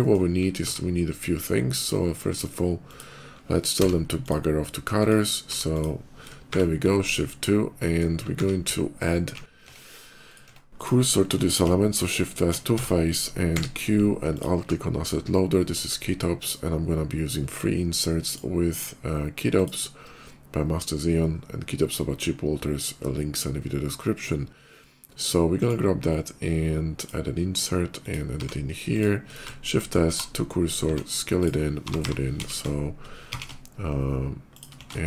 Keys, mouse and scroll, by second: 0.4 q, 1.5 click, 2.1 click, 2.7 click, 3.8 m, 4.1 click, 4.8 click, 5.6 click, 6.3 shift+2, 6.9 middle click, 7.5 middle click, 8.1 q, 9.5 Tab, 10.1 click, 10.6 click, 11.4 shift+s, 12.6 Tab, 12.6 shift+s, 13.4 q, 14.1 alt+click, 16.0 click, 17.9 click, 19.4 click, 25.4 click, 26.7 click, 27.9 click, 28.3-33.1 typing, 28.8 click, 30.3 middle click, 31.2 click, 34.4 click, 34.6 s.